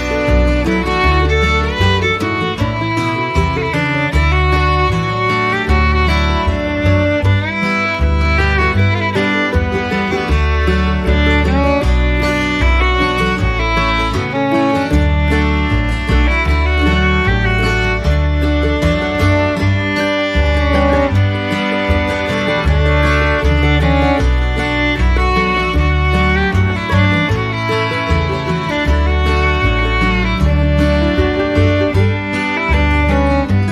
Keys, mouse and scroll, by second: 8.3 ctrl+shift+click, 8.7 ctrl+shift+click, 9.3 ctrl+shift+click, 16.6 ctrl+z, 17.6 ctrl+z, 18.1 ctrl+shift+click.